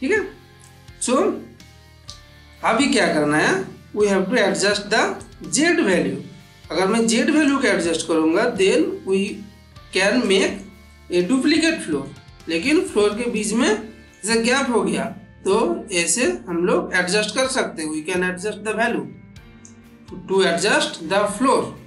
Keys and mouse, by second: 2.4-3.0 middle drag, 5.0-7.6 drag, 7.8-10.0 middle drag, 10.1-10.7 shift+middle drag, 15.3-19.7 drag, 20.6-21.8 middle drag.